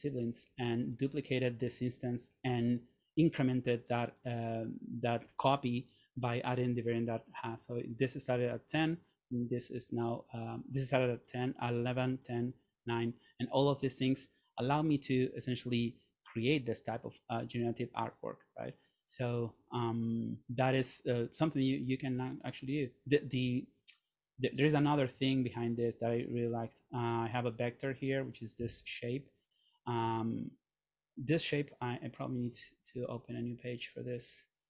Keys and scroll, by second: 30.1 super+c.